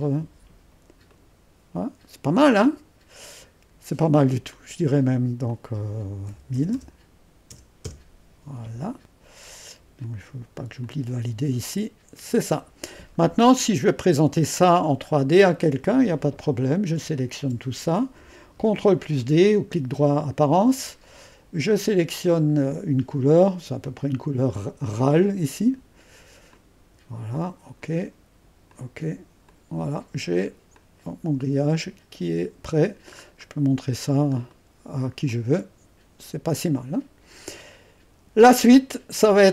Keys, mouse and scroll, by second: 1.1 click, 2.6-6.2 drag, 6.0-7.5 typing, 7.8 Return, 10.0-14.8 drag, 14.8-15.2 scroll up 1, 15.2-16.2 scroll down 1, 16.4-18.2 drag, 20.5 ctrl+d, 21.9-23.7 drag, 23.8 click, 25.1-26.5 drag, 30.3-30.8 scroll up 1, 30.8 middle click, 33.1-34.5 scroll up 1, 34.5-39.5 drag.